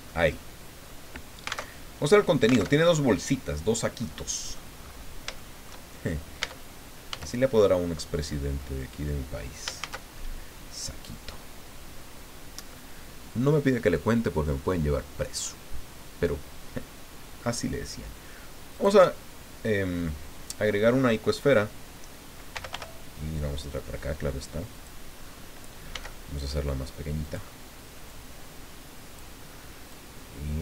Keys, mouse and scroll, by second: 0.0 click, 1.6 alt+Tab, 2.7 alt+Tab, 3.6 scroll down 2, 4.0 click, 4.8-5.2 scroll up 2, 5.4 shift+click, 6.0 shift+click, 6.4 Tab, 7.1 a, 7.8 click, 8.6 click, 9.8 shift+a, 18.7 click, 19.8 scroll down 2, 20.3 scroll down 2, 22.3-23.2 typing, 24.7 click, 25.2-25.7 scroll up 2, 25.9 s, 27.2 click, 28.1-29.4 drag, 29.9-30.6 drag.